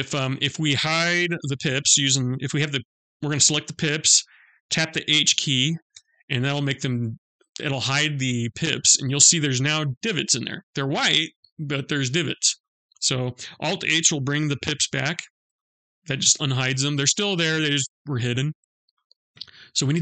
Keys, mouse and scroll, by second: 3.1 click, 5.4 h, 8.3 middle click, 10.4-11.5 scroll up 6, 11.4 middle click, 12.2 scroll down 2, 12.4 scroll up 1, 12.6-14.2 scroll down 2, 14.3 alt+h, 15.0 middle click, 18.5 scroll up 2, 18.7 scroll down 1.